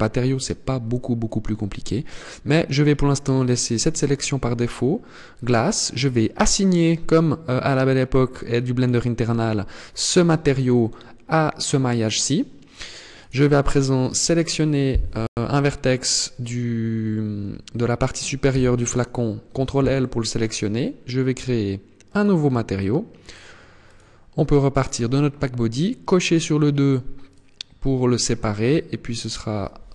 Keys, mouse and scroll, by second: 7.9 click, 12.7 right click, 17.9 ctrl+l, 21.5 click, 22.7 click, 23.3 click, 25.5 click, 26.7 click.